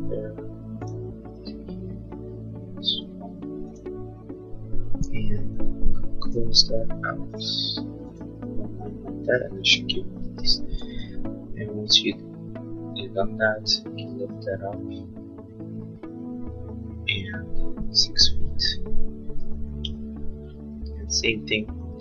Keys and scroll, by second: 6.3 l, 10.2 space, 11.0 p, 19.2-20.1 typing.